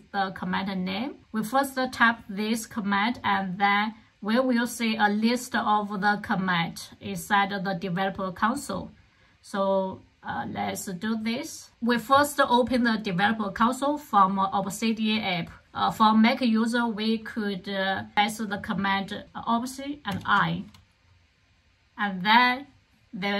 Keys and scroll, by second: 20.0 alt+super+i.